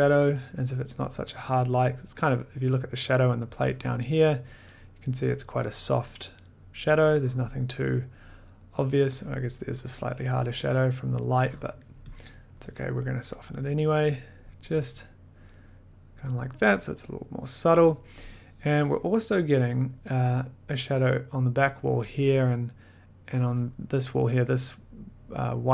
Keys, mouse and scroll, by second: 2.2 click, 3.9 click, 3.9 middle click, 7.4 middle click, 7.7 middle click, 9.2 click, 9.3-9.8 scroll, 11.6 click, 11.6 scroll, 12.2 click, 12.4-13.3 scroll, 16.3 click, 17.2 scroll, 23.6 click, 23.7 middle click.